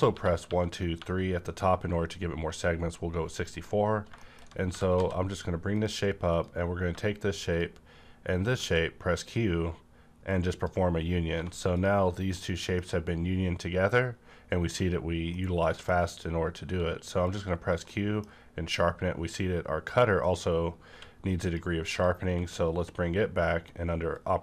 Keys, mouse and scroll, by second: 0.0-1.0 typing, 3.5 click, 3.8 scroll down 1, 4.2 shift+middle click, 4.4 scroll up 1, 4.6 g, 5.0 z, 5.7 click, 6.3 click, 7.4 shift+click, 8.6 q, 10.2 shift+click, 10.3-11.7 drag, 11.3 1, 12.3-16.5 middle drag, 16.2-16.5 scroll up 1, 16.5 q, 17.3 click, 17.9-21.3 middle drag, 20.9 q, 21.3 click, 21.9 click, 22.1 q, 24.1 click.